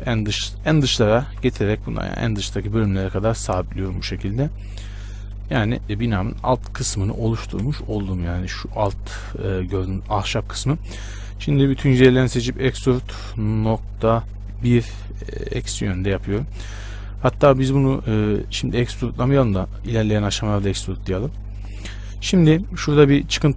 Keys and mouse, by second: 1.5 g, 3.7-5.7 drag, 5.3 middle click, 5.7 z, 7.9 shift+space, 11.3 a, 12.6 e, 17.6 ctrl+z, 18.9 Tab, 21.0 Tab.